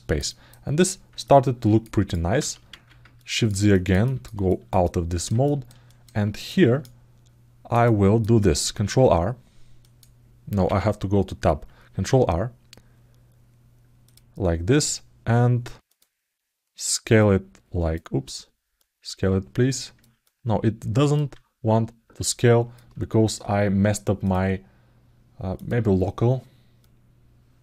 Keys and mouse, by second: 1.0 ctrl+alt+middle click, 1.8 alt+middle click, 2.9 ctrl+alt+middle click, 3.5 alt+middle click, 3.8 ctrl+alt+middle click, 4.2 alt+shift+middle click, 4.6 alt+middle click, 5.2 ctrl+alt+middle click, 5.6 alt+shift+middle click, 6.2 click, 6.6 alt+middle click, 7.6 alt+shift+middle click, 9.6 click, 17.0 click, 18.8-19.8 drag, 20.0 alt+middle click, 22.2 alt+middle click, 24.0-25.6 drag, 26.6 click.